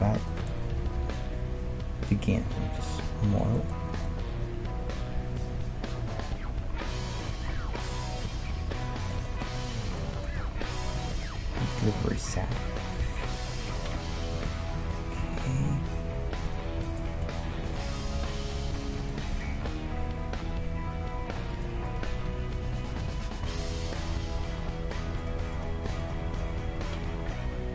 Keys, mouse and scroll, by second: 0.3-2.1 middle drag, 0.7 g, 3.5-5.9 middle drag, 3.8 Tab, 9.2-13.0 middle drag, 13.0 KP_3, 15.2 Tab, 16.4 right click, 18.2 g, 18.6-21.1 right drag, 19.5 g, 21.9-27.7 right drag, 22.2 g, 24.2 g, 26.2 g.